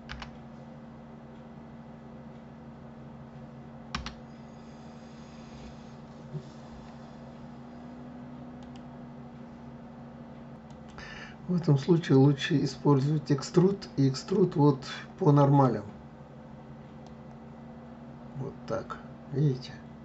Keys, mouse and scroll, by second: 0.0 r, 12.7-15.7 drag, 17.1 click.